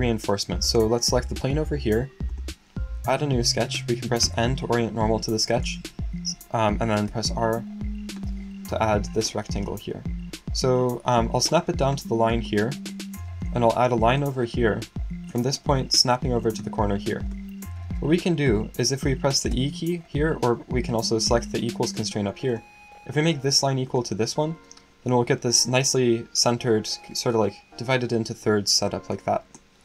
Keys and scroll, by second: 4.2 n, 7.1 r, 19.5 e.